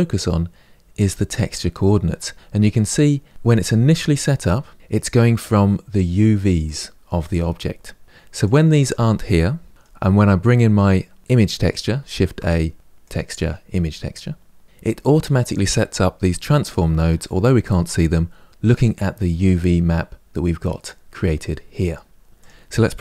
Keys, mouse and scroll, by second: 9.7 Delete, 22.2 click.